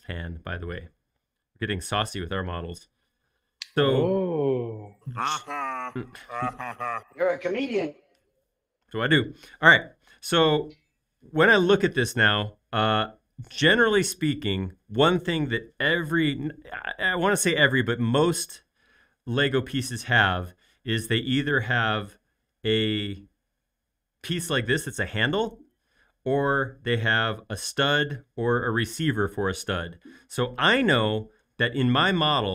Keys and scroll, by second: 1.3 space.